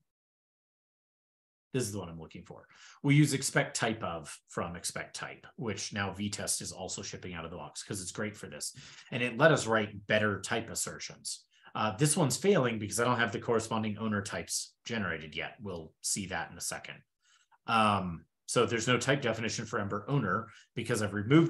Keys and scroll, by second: 3.3 super+Left, 3.5 shift+super+Right.